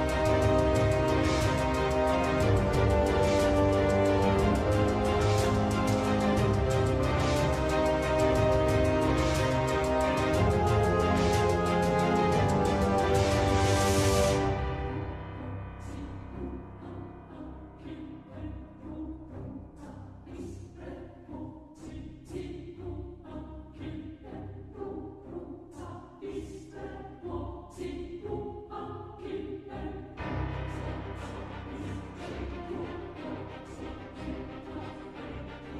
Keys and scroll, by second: 11.1 scroll down 1, 11.1-11.7 scroll up 2, 12.6 scroll down 1, 13.2 scroll down 1, 13.2 scroll up 1.